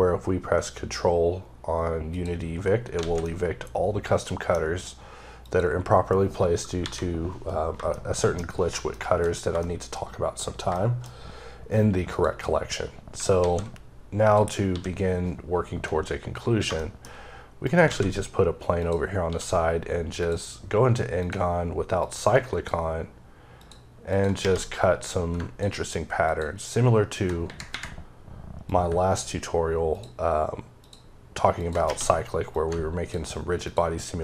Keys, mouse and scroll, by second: 2.6 scroll down 3, 2.8 alt+a, 3.1 middle click, 4.4 scroll up 2, 5.3 click, 5.8-6.6 scroll down 2, 6.6 KP_7, 7.3-7.8 scroll down 3, 7.8 shift+middle click, 9.1-9.4 shift+scroll down 3, 9.4 shift+middle click, 9.9-10.5 scroll up 1, 10.5 shift+scroll up 1, 10.6 shift+middle click, 11.9 click, 13.2 alt+a, 14.1 click, 14.5 d, 16.5 shift+scroll down 1, 16.6 shift+middle click, 17.5 shift+right click, 17.7 shift+a, 18.6 click, 19.1 d, 20.0 click, 21.0 click, 21.9 click, 23.9 double click, 24.9 click, 28.5 click, 30.6 ctrl+double click, 31.4 ctrl+click, 32.4 click.